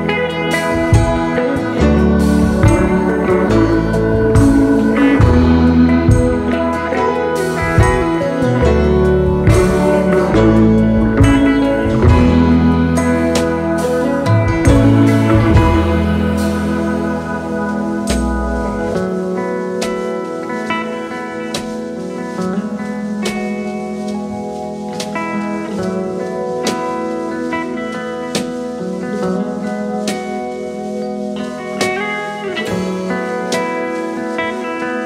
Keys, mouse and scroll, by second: 5.1 double click, 8.0-8.5 alt+scroll down 3, 8.6 space, 9.3 alt+scroll down 1, 9.8-10.6 space, 10.7 alt+scroll up 1, 15.5-16.3 typing, 16.6 double click, 16.9 right click, 27.3 double click, 28.2 5, 29.9-31.2 typing, 33.3 Return, 34.7 alt+scroll down 1.